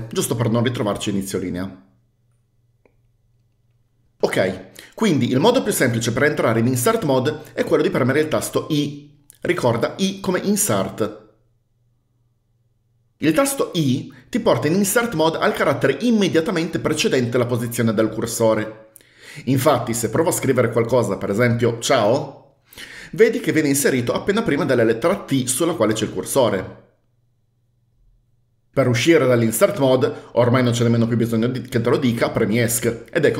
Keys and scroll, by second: 9.0 i, 21.9-23.0 typing, 32.8 Escape.